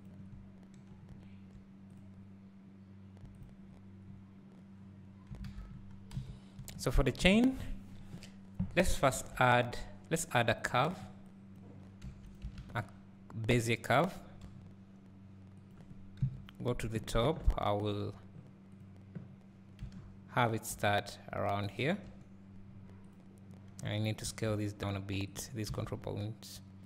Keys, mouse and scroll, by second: 2.0 click, 5.4 alt+a, 6.2 KP_1, 7.0-9.1 scroll up 1, 14.4 g, 16.2 KP_1, 17.2 Tab, 17.9 click, 20.7 g, 22.0 o, 23.1 click, 24.2 s, 25.4 click, 25.7 s.